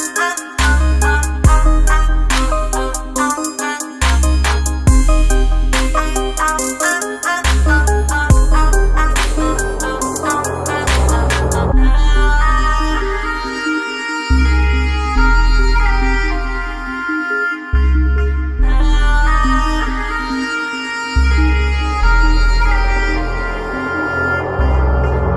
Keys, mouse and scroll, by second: 1.7 right click, 1.9 right click.